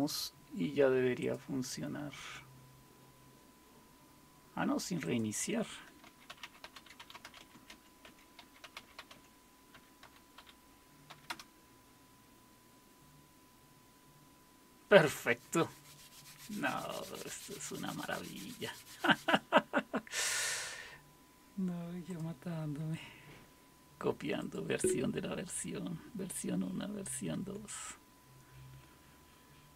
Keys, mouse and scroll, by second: 1.2 click, 5.0 click, 5.8-11.1 typing, 11.3 Return, 22.1 click, 23.0 F5, 24.4 click, 27.3 Escape.